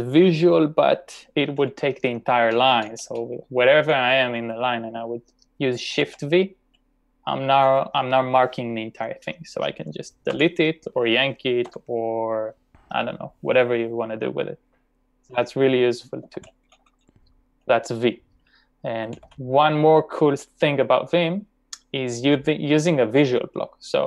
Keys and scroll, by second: 2.5 typing, 6.0 shift+v, 10.4 d, 11.6 u, 16.2-16.9 typing, 18.9-20.3 typing.